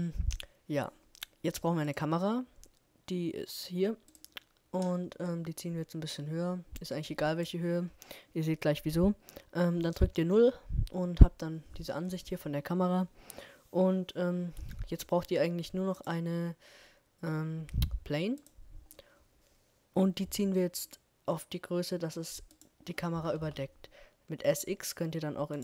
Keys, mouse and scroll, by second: 1.0-2.4 middle drag, 2.4-4.4 drag, 6.7 KP_0, 7.7 middle click, 13.0-15.1 drag, 17.8 s, 20.8 s, 24.5 middle click.